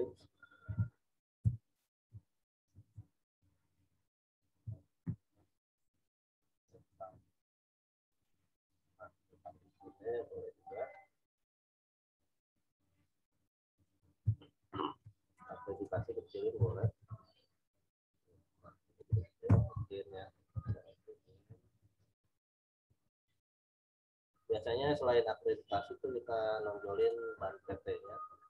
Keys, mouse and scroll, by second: 1.4 m, 1.6 click, 2.7 ctrl+t, 3.7 alt+shift+click, 5.0 Return, 5.4 click, 7.1 v, 7.4 click, 13.2 right click, 13.7 click, 14.2 Right, 15.3 right click, 15.7 click, 16.5 ctrl+t, 17.4 alt+shift+click, 19.4 Return, 27.0 click, 27.8 scroll up 1.